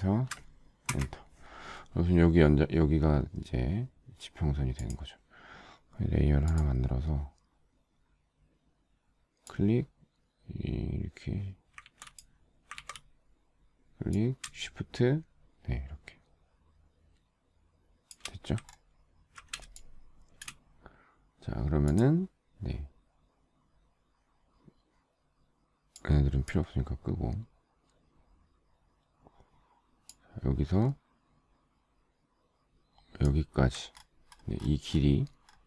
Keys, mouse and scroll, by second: 1.3 Return, 12.2 ctrl+z, 13.1 ctrl+z, 19.0 alt+scroll down 1, 20.0 space, 20.5 space, 20.6 space, 20.7 space, 26.3 click, 34.3-34.8 alt+scroll up 1.